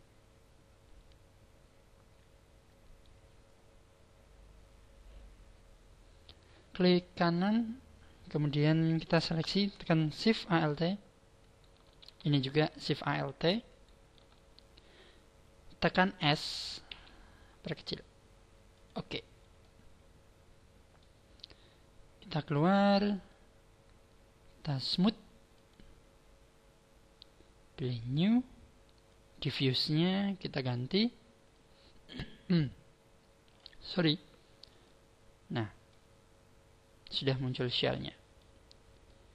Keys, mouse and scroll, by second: 7.1 right click, 11.4 alt+shift+right click, 13.7 alt+shift+right click, 16.9 s, 18.8 click, 19.3-19.8 scroll down 5, 19.6 middle click, 22.6 click, 23.3 click, 25.5 click, 28.0 click, 30.8 click, 34.8 click, 35.8 middle click, 37.4 middle click, 38.6-39.2 scroll down 3, 39.0 middle click.